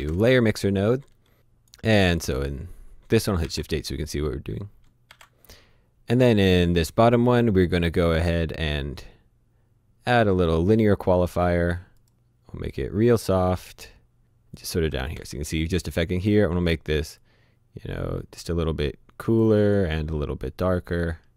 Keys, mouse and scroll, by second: 1.3 click, 3.4 shift+h, 4.6-5.6 typing, 6.1 click, 10.4 click, 11.0-11.8 scroll down 2, 11.2 click, 11.8 click, 15.1 shift+h, 17.2 click, 20.2-21.2 scroll down 1, 21.2-21.3 scroll up 1.